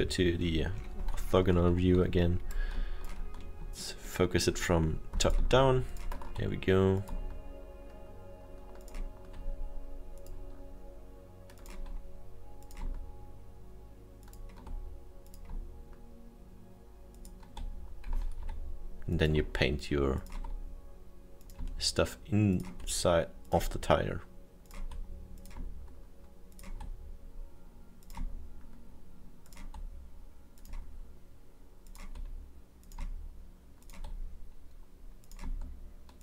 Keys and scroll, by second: 20.3 ctrl+z.